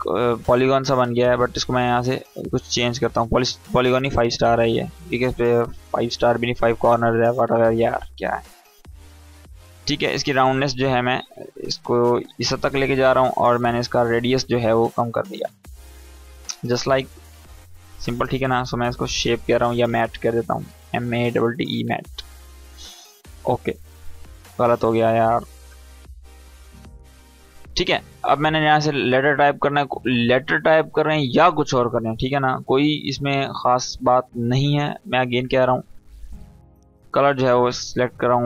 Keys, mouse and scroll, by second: 1.7 click, 4.7 click, 7.4 click, 8.3 Tab, 10.5-12.1 drag, 18.1 Return, 18.5-21.5 typing, 21.5 Return, 22.9 click, 25.3 Return, 26.5 Right, 26.6 e, 27.4 click, 27.9 right click, 28.3 click, 31.2 Caps_Lock, 32.4 w, 33.9 click, 34.9 Caps_Lock, 36.3 click, 37.7 scroll up 1.